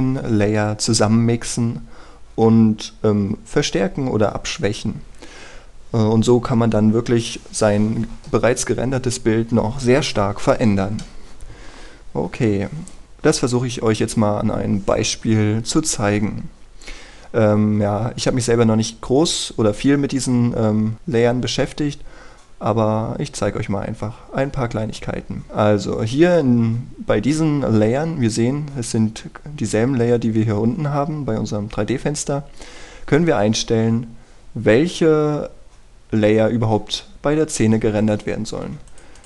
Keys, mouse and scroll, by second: 13.0 click, 17.6-21.2 scroll up 1, 23.7-39.2 scroll down 1.